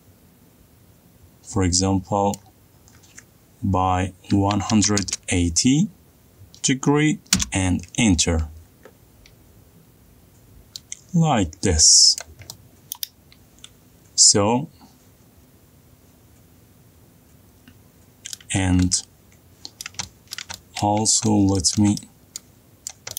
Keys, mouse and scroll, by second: 3.1 click, 5.1-5.8 typing, 8.1 Return, 12.7 middle click, 13.0 click, 13.3 middle click, 14.6 middle click, 19.1 middle click, 19.2 middle click, 19.3 middle click, 19.4 middle click, 20.6 middle click, 20.6 middle click, 21.1 shift+middle click, 21.1 middle click, 21.4 middle click, 21.6 middle click, 21.8 middle click, 22.1 middle click, 22.4 middle click, 22.8 middle click.